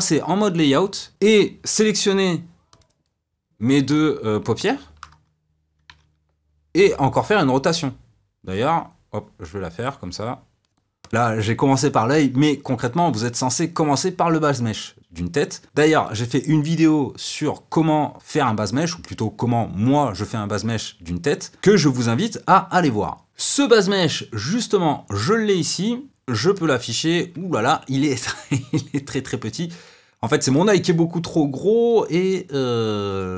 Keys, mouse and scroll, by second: 1.1 KP_1, 2.7-3.9 drag, 4.6 shift+click, 6.0 r, 11.0 click, 25.2 click, 29.4 click.